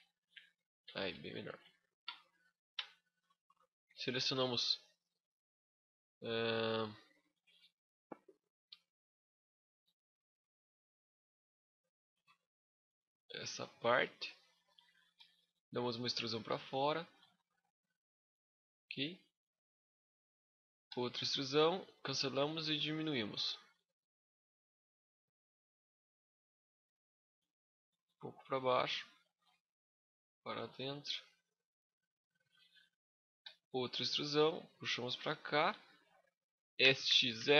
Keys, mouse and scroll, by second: 0.0 middle click, 0.6 Tab, 1.2 KP_5, 1.9-2.3 scroll down 6, 2.2 middle click, 2.6 Tab, 2.8 scroll up 3, 3.2 shift+middle click, 3.8 alt+right click, 4.2 middle click, 5.4 middle click, 5.4 scroll up 1, 13.0 middle click, 14.9 e, 15.3 right click, 15.6-16.0 scroll up 1, 16.0 click, 17.0 middle click, 19.1 middle click, 20.7 e, 21.0 right click, 22.4 s, 27.8 shift+click, 30.7 middle click, 30.7 scroll up 1, 33.2 e, 33.6 right click, 34.0 click, 36.6 s.